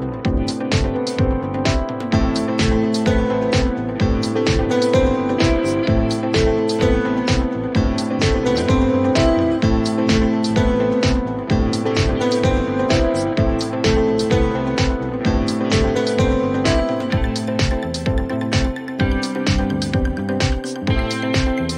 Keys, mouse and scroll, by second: 0.1 click, 0.4-1.6 typing, 2.6 Return, 6.4 click, 8.2 click, 9.4 click, 12.0 click, 13.1 ctrl+d, 14.2 p, 15.6 click, 16.0-16.9 typing, 17.4 Return, 18.8 typing, 20.0 click.